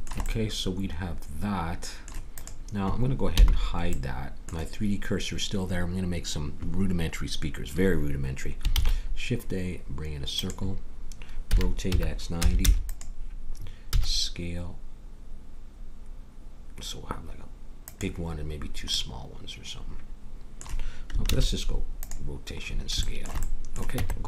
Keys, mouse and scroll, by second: 0.0-2.3 middle drag, 2.3-4.3 drag, 3.3 h, 3.9 middle click, 4.3 middle click, 8.7 shift+a, 11.4 r, 13.9 s, 18.9 middle click, 21.3 ctrl+a, 24.0 Tab.